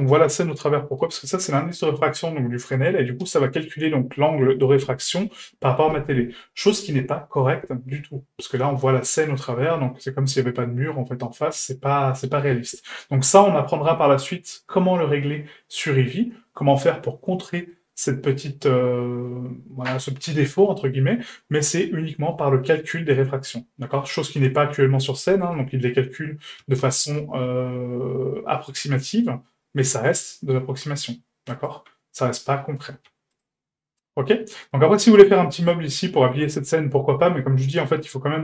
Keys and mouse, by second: 5.9-8.5 middle drag, 9.6-12.4 middle drag, 15.3-17.7 middle drag, 17.9 shift+middle click, 18.4-22.4 middle drag, 22.6-23.0 shift+middle drag, 23.6 shift+middle drag, 25.5 right click, 26.6 g, 32.1-32.8 middle drag, 32.9 a, 34.0 middle drag, 34.7 middle drag, 36.9-37.4 middle drag, 37.6 shift+middle drag.